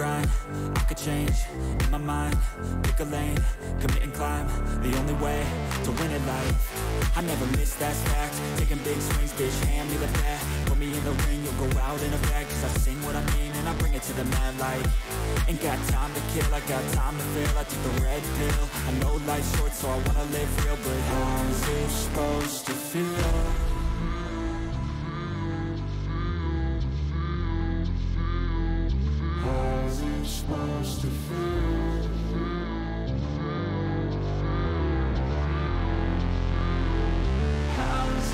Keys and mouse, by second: 0.3 click, 2.6 click, 3.8 alt+click, 4.4 alt+shift+click, 4.7 alt+shift+click, 5.4 click, 8.9-10.1 drag, 12.0-13.6 drag, 14.9 alt+shift+click, 15.2 alt+shift+click, 16.5 shift+click, 16.8 ctrl+shift+click, 19.5-21.0 drag, 22.7-23.9 drag, 24.8 alt+click, 25.3 alt+shift+click, 25.5 alt+shift+click, 26.1 click, 26.7 shift+click, 30.3-31.9 drag, 33.1 click, 33.9 click, 35.7 click, 37.9 click.